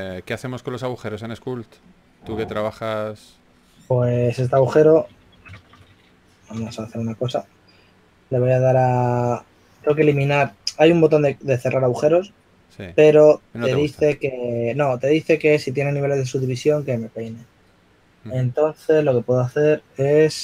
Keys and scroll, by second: 1.2 shift+f, 4.4 shift+f, 5.4-7.4 typing.